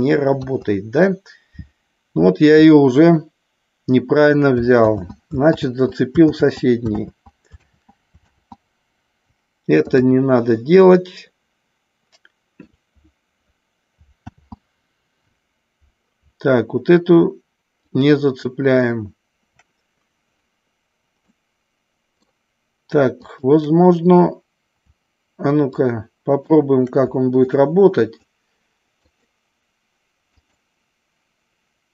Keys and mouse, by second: 0.3 KP_3, 4.8 ctrl+z, 5.6 ctrl+z, 6.2 ctrl+z, 6.9 ctrl+z, 7.6 ctrl+z, 8.2 ctrl+z, 10.8-12.6 middle drag, 14.2 ctrl+z, 17.8 shift+click, 21.2-22.2 middle drag, 23.2-24.2 shift+drag, 25.7-26.5 shift+drag, 27.5-28.2 shift+drag, 29.1 shift+click, 30.3 shift+click.